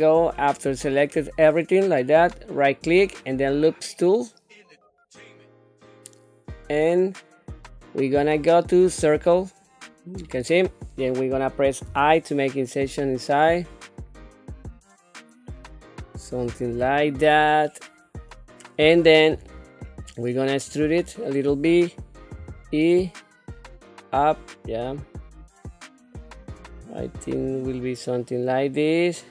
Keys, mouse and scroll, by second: 2.5-9.0 right drag, 11.9 i, 13.8 typing, 17.5-18.8 middle drag, 19.4 shift+middle click, 20.0 shift+middle click, 20.8 middle click, 22.4 e.